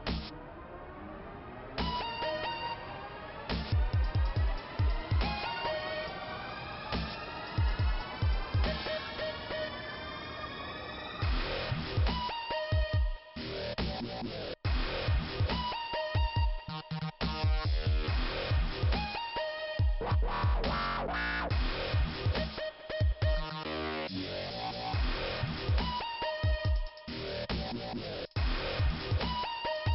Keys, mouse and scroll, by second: 0.0 double click, 0.9 double click, 2.1 click, 2.1 click, 2.2 click, 2.3 double click, 3.1 double click, 5.9 click, 12.7 alt+i, 14.3 ', 15.3 click, 16.2 click, 18.2 click, 18.4 click, 21.8 click, 23.5 click, 24.7 click, 26.0 click, 27.7 click.